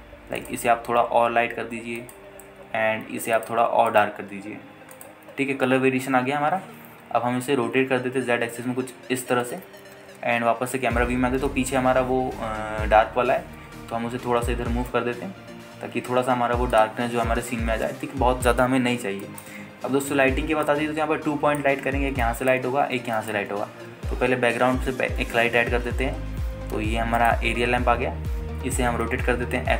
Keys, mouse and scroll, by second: 0.6 click, 1.6 click, 4.5 click, 5.1 drag, 6.8-7.4 scroll down 2, 8.0 scroll down 1, 8.9 r, 9.0 z, 10.6 ctrl+click, 11.2 KP_0, 12.2-13.6 scroll down 2, 12.7-13.6 scroll up 1, 13.9-14.2 scroll down 1, 14.5 g, 14.7 y, 18.0 click, 18.6-18.9 scroll up 2, 18.9 ctrl+space, 20.0 scroll up 1, 20.4 shift+middle drag, 23.4-26.1 right drag, 26.2 shift+a.